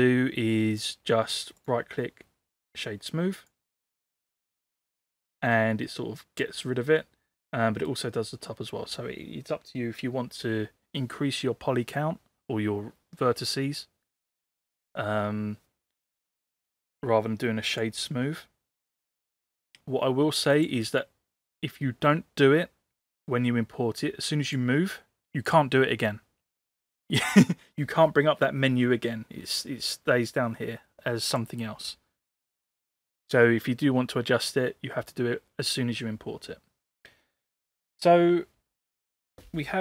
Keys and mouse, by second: 0.8 drag, 1.7-4.5 right drag, 4.6-5.9 middle drag, 6.7-7.9 middle drag, 16.9 ctrl+z, 18.2-19.8 middle drag, 24.3 click, 31.3-31.7 drag.